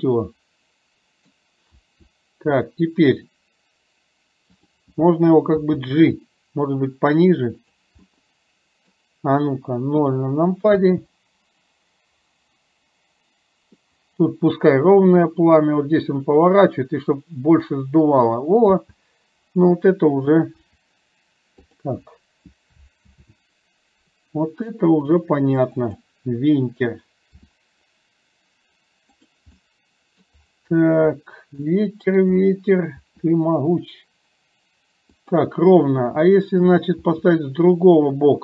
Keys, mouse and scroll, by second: 1.9 r, 5.8 g, 8.1-9.2 middle drag, 10.1 KP_0, 10.7 space, 18.7 space, 20.6 r, 23.1 ctrl+z, 25.9 click, 27.6 r, 29.6-30.4 middle drag, 31.7-32.2 middle drag, 33.0 r, 36.1 middle click, 37.2 r.